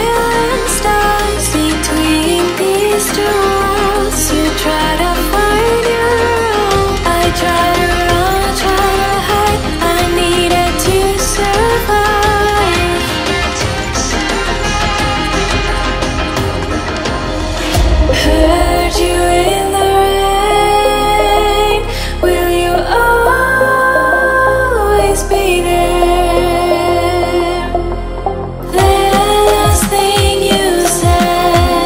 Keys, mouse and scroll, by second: 1.6 r, 1.8 shift+middle click, 4.7 r, 6.3 e, 7.5 e, 8.3 r, 9.4 ctrl+s, 9.6 shift+middle click, 9.9 scroll up 1, 10.5 e, 11.8 r, 14.3 v, 14.9 click, 15.0 click, 15.5 click, 15.7 click, 16.7 e, 18.1 v, 18.8 r, 20.8 r, 21.5 click, 22.1 click, 23.1 click, 23.2-24.5 shift+middle drag, 23.6 e, 24.5 r, 25.6 e, 26.2 r, 27.5 click, 28.2 e, 30.5 r.